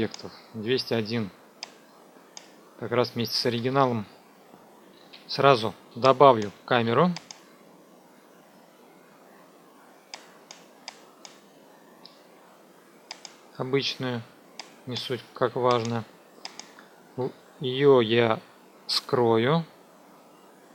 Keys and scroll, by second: 4.6 F2, 5.0 ctrl+s, 6.7 ctrl+s.